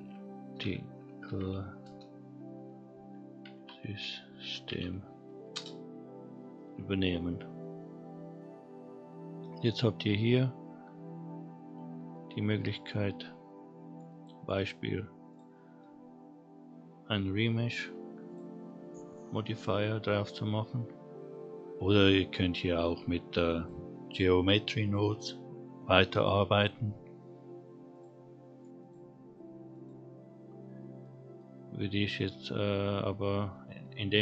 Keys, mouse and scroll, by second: 7.6-10.7 scroll up 2, 10.8 scroll down 1, 11.1-12.0 scroll up 2, 12.1-12.6 shift+middle drag, 12.7 scroll up 2, 13.2-13.9 middle drag, 14.1 middle click, 15.3-18.7 drag, 21.0-23.1 scroll down 1, 23.9 click, 25.2 click, 26.5 click, 27.9 click, 28.8 click, 29.7 click, 30.8 scroll up 1, 31.0-31.3 middle drag, 31.7-32.0 scroll down 1, 32.0 middle drag, 32.5-33.1 scroll down 1, 33.1-34.0 middle drag, 34.0-34.2 scroll up 1.